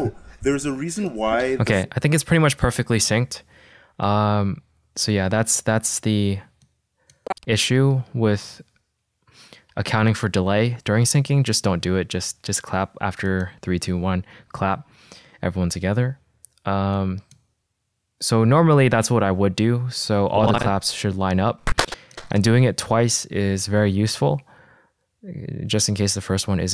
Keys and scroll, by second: 1.8 space, 8.0 =, 8.9 =.